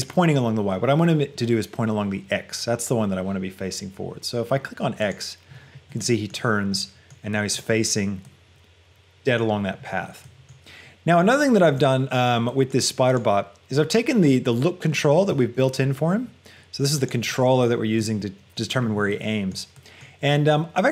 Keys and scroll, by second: 15.5 g, 18.1 g.